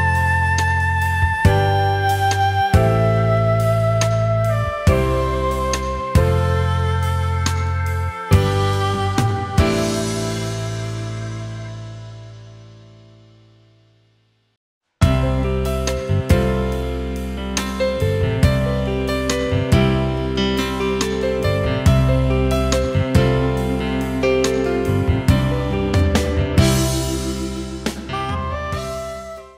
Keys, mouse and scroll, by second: 9.9-10.3 alt+scroll down 1, 10.3 space, 11.3 alt+scroll down 1, 11.6 space, 12.5 alt+scroll up 1, 14.4 alt+scroll down 1, 14.7 space, 15.4 alt+scroll down 1, 15.7 space.